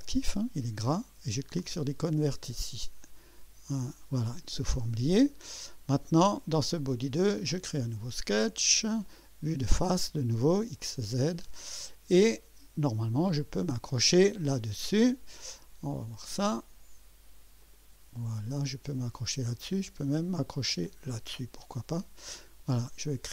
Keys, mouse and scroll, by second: 3.0 click, 7.3 click, 9.0 click, 10.8 click, 11.9 scroll up 1, 12.3-13.2 right drag, 16.2 click, 17.6 click, 18.5-19.1 scroll down 3, 20.8 click.